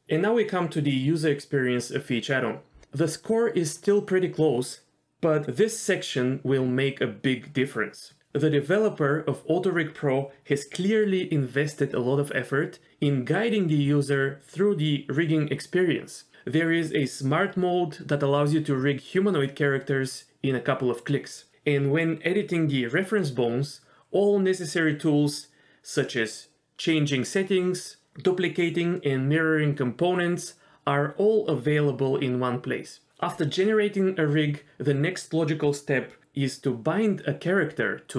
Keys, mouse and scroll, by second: 0.3 click, 2.3 ctrl+g, 3.2 middle click, 3.2 g, 3.4 middle click, 3.6 middle click, 4.4 middle click, 4.9 click, 5.3 ctrl+z, 6.6 middle click, 6.9 middle click, 7.4 middle click, 10.8 click, 12.7-24.4 drag, 25.0 middle click, 29.6 middle click, 30.5 middle click, 30.6 ctrl+z, 30.9 shift+middle click, 31.8 middle click, 31.9 middle click, 32.0 click, 32.3 click, 32.5 x, 34.0 click, 34.9 middle click, 35.0 middle click, 35.2-38.1 drag.